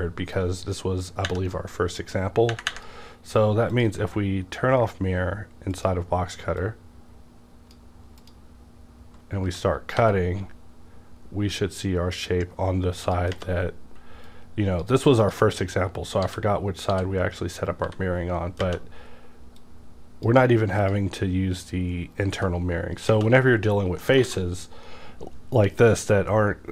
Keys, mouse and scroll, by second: 0.3-9.5 drag, 9.5 g, 10.5 g, 13.0 click, 14.6-16.2 drag, 16.2 w, 16.9 w, 17.8 g, 19.6-22.3 drag, 22.3 g, 23.8 scroll down 2, 24.0 middle click, 24.2 alt+a.